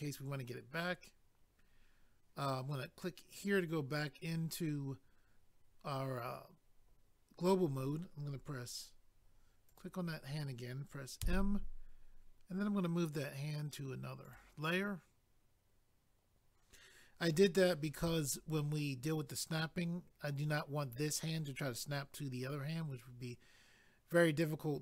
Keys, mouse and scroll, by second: 3.3 click, 3.4 click, 9.7 click, 10.9 click, 11.2 m, 14.2 click, 14.4 click.